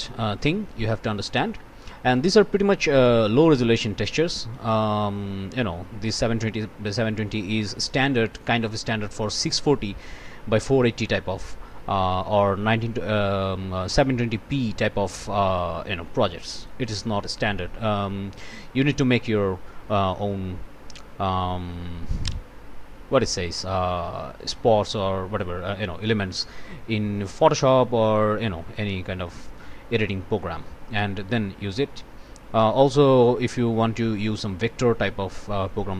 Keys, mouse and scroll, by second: 0.4 click, 2.1 right click, 3.3 right click, 4.7 right click, 7.4 right click, 8.8 right click, 10.6 right click, 16.6 right click, 17.4 scroll down 2, 19.1 scroll up 2, 24.4 click, 29.7 scroll up 1, 30.9 click, 34.2 scroll up 1, 34.9 scroll down 1.